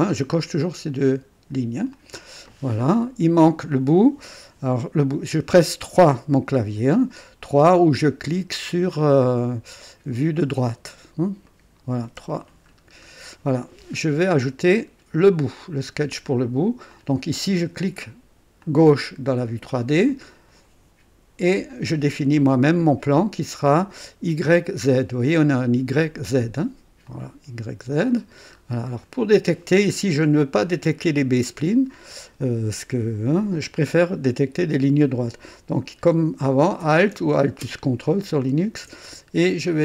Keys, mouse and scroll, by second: 1.9 click, 2.6-3.7 scroll down 4, 3.7 right click, 10.4 click, 11.5 right click, 12.1 KP_3, 12.7-13.0 scroll up 1, 13.3 right click, 16.9 click, 18.6 click, 21.5 click, 27.1 click, 27.9 click, 28.6-28.9 scroll up 2, 29.0 right click, 38.1 ctrl+alt+click.